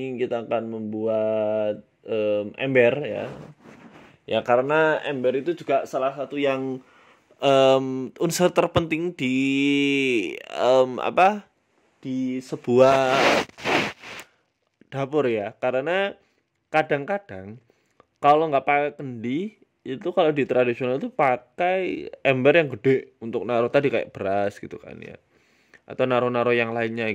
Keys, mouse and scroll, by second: 0.8 shift+middle click, 1.2 click, 1.6-1.9 scroll up 3, 1.9 e, 2.4 s, 3.3 e, 4.6 ctrl+z, 4.9 s, 5.9 e, 7.0 s, 8.2 Tab, 8.3 middle click, 8.6-9.0 scroll down 7, 8.9 middle click, 9.1-9.5 scroll up 3, 9.3 middle click, 10.5 scroll down 1, 10.7 middle click, 11.5 s, 12.3 shift+middle click, 12.7 KP_3, 13.1 middle click, 13.3 scroll down 1, 13.6 shift+middle click, 13.8-14.2 scroll up 10, 14.2 shift+middle click, 14.9 Tab, 15.6 click, 16.3 right click, 16.7 right click, 17.4 Delete, 19.0 middle click, 19.2 Tab, 19.4-19.9 scroll down 4, 19.7 middle click, 19.9 scroll up 2, 20.0 scroll down 1, 20.1 shift+middle click, 20.5 KP_3, 20.8-21.1 scroll down 7, 21.0-22.0 scroll up 4, 21.2 shift+middle click, 22.0-23.0 scroll up 2, 22.0 g, 23.2 s, 24.2 s, 24.7 g, 26.1 s, 26.8 g.